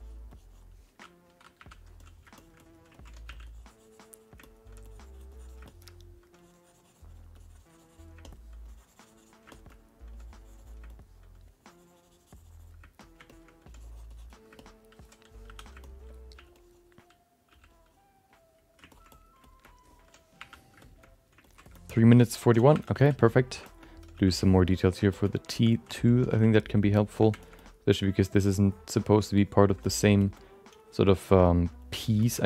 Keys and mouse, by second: 0.3 click, 1.6 1, 2.0 middle click, 2.3 alt+shift+middle click, 2.6 alt+middle click, 2.9 ctrl+middle click, 3.2 f, 3.4 click, 4.4 alt+middle click, 4.8 click, 5.6 alt+shift+click, 5.6 shift+middle click, 5.8 alt+middle click, 6.4 click, 7.3 click, 8.2 middle click, 8.6 click, 9.5 alt+shift+middle click, 9.7 alt+middle click, 10.1 click, 10.9 alt+middle click, 11.3-12.7 drag, 13.0 alt+middle click, 13.3 alt+shift+middle click, 13.6 click, 14.6 alt+middle click, 15.5 2, 15.8 middle click, 16.3 f, 16.5 click, 17.5 f, 17.7 click, 18.3 click, 18.9 ctrl+alt+middle click, 19.1 alt+middle click, 19.4 alt+shift+middle click, 19.6 alt+middle click, 20.4 1, 20.8 alt+shift+middle click, 21.0 alt+middle click, 21.4 ctrl+middle click, 21.7 alt+shift+middle click, 22.0 middle click, 22.2 ctrl+alt+middle click, 22.7 2, 23.0 click, 23.2 click, 23.6 shift+middle click, 23.8 alt+middle click, 24.1 f, 24.4 click, 24.8 click, 25.2 middle click, 25.5 shift+middle click, 25.7 alt+middle click, 25.9 ctrl+middle click, 26.3 f, 26.5 click, 26.7 click, 27.4 alt+shift+middle click, 27.6 alt+middle click, 28.0 click, 28.4 click, 28.9 click, 29.4 click, 29.8 alt+middle click, 30.2 alt+shift+middle click, 30.3 alt+middle click, 30.8 click, 31.4 middle click, 31.8 click, 32.2 shift+middle click, 32.4 alt+middle click.